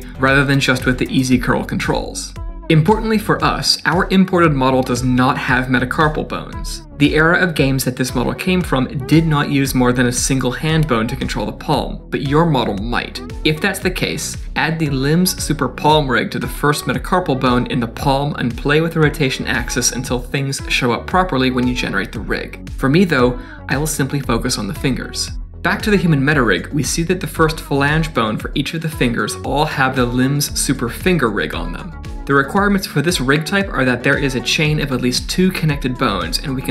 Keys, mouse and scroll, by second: 0.0 click, 0.0 r, 1.0 click, 1.3 click, 1.5 r, 2.2 middle click, 6.4 middle click, 7.7 click, 8.4 click, 9.3 middle click, 10.9 click, 13.0 click, 24.2 click, 24.7 click, 26.1 click, 27.1 click, 27.5 middle click, 28.1 click, 29.3 click, 31.4 click.